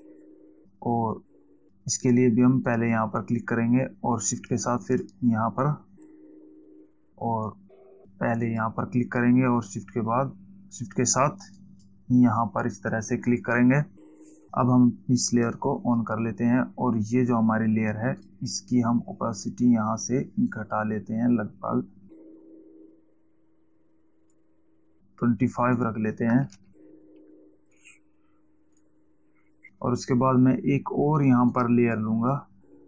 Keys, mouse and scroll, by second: 3.2 click, 5.3 shift+click, 6.1 shift+click, 9.0 click, 12.0 shift+click, 15.8 click, 18.7 click, 21.0 click, 26.0 click, 28.1 click, 29.1 click, 32.0 click.